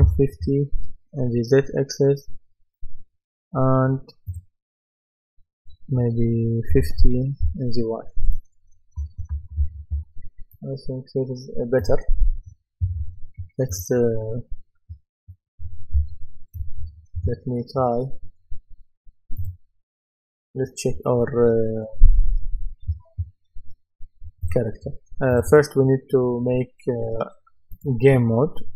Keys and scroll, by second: 0.4 Return, 6.7 KP_5, 7.5 Return, 8.8-10.5 typing, 16.0 w.